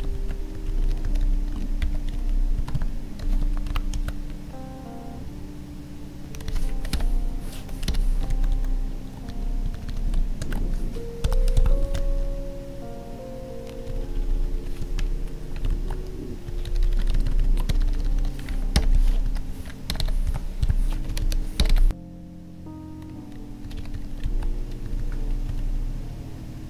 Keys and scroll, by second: 0.2 ctrl+x, 0.5 Down, 0.6 Right, 0.8 Down, 2.1 Up, 2.6 Tab, 3.2 Left, 3.7 ctrl+v, 6.5 Left, 8.3 ctrl+z, 9.3 Left, 10.4 ctrl+d, 11.8 ctrl+s, 13.9 Up, 14.8 Escape, 15.7 ctrl+Tab, 16.5 Up, 17.1 ctrl+Right, 17.7 Left, 19.3 Right, 21.1 Up, 21.9 ctrl+s, 23.6 Down, 24.2 ctrl+Tab, 24.8 Down.